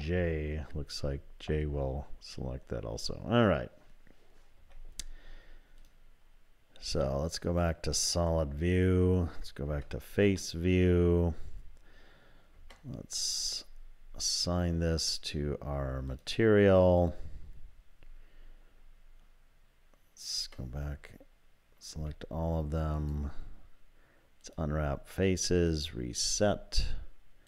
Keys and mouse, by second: 4.6 z, 7.1 click, 9.7 3, 10.6 click, 12.6 Tab, 16.2 click, 20.4 Tab, 21.9 a, 23.0-25.7 drag.